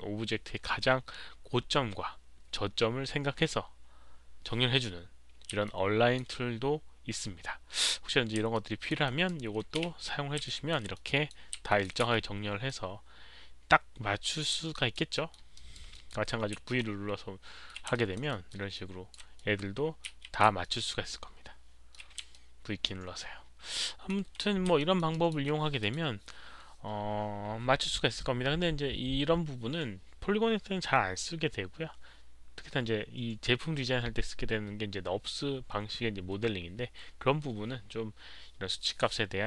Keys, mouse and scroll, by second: 5.6 alt+click, 7.7 click, 8.5 alt+click, 9.0 alt+right click, 9.8 w, 10.4 alt+click, 10.7 alt+right click, 10.7 w, 10.9 alt+click, 11.6 alt+click, 12.4 alt+right click, 12.4 w, 12.6-14.4 alt+drag, 14.7 alt+right click, 15.1 alt+middle click, 15.5 alt+right click, 15.9 alt+middle drag, 16.6 v, 16.7-17.6 alt+middle drag, 17.9 alt+right click, 18.2 alt+middle click, 18.7 alt+click, 19.0 alt+v, 19.0 alt+right click, 19.3-20.0 alt+middle drag, 20.3-21.1 typing, 20.6-21.9 alt+middle drag, 20.6 alt+click, 20.6 alt+right click, 22.3-24.7 alt+drag, 22.4 alt+v, 22.7 alt+middle click, 22.7 alt+right click, 22.7-24.0 typing, 23.5 alt+middle click, 23.5 alt+right click, 24.7 alt+middle drag, 25.1 alt+drag, 25.7 alt+middle click, 25.7 alt+right click, 25.8 alt+click, 28.1-30.6 typing, 28.4 alt+click, 28.4 alt+middle click, 30.1 alt+middle click.